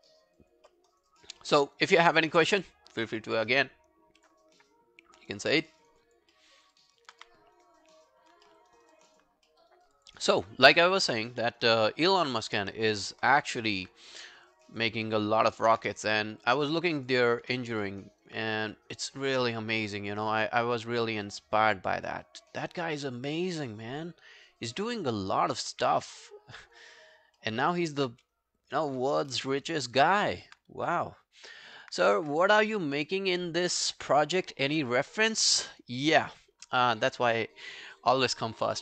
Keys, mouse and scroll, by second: 0.2 alt+scroll up 1, 0.4 alt+click, 0.7 alt+middle click, 0.9 alt+right click, 1.1 alt+click, 1.4 alt+middle click, 1.7 alt+right click, 2.0 alt+click, 2.4 alt+scroll down 1, 2.6 alt+click, 5.3 alt+click, 5.3 alt+right click, 5.6 alt+middle click, 5.8 alt+right click, 6.1 alt+click, 6.4 alt+middle click, 6.6 alt+right click, 6.8 alt+click, 7.2 q, 7.6 right click, 8.5 alt+middle click, 8.7 alt+right click, 9.0 alt+click, 9.5 alt+middle click, 9.7 alt+right click, 10.0 alt+click, 10.3 alt+middle click, 10.6 alt+scroll down 1, 10.9 alt+click, 11.3 alt+middle click, 11.4 alt+right click, 11.7 alt+click, 12.1 alt+middle click, 12.3 alt+right click, 12.6 alt+click, 13.0 alt+middle click, 13.3 alt+right click, 13.6 alt+middle click, 14.7 double click, 15.1 alt+middle click, 15.3 alt+right click, 15.5 alt+click, 16.1 shift+right click, 17.9 alt+middle click, 18.1 alt+right click, 27.4 alt+middle click, 27.7 alt+right click, 27.9 alt+click, 28.1 w, 28.4 right click, 29.3 alt+middle click, 29.5 alt+right click, 29.8 alt+click.